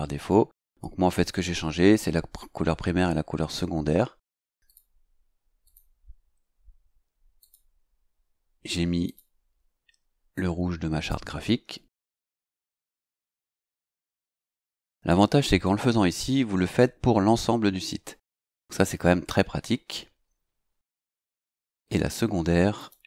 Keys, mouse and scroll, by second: 4.7 click, 5.6 click, 7.4 click, 9.0 click, 10.3 click, 11.9 c, 13.1 KP_0, 14.8 Return, 21.2 click, 22.8 click.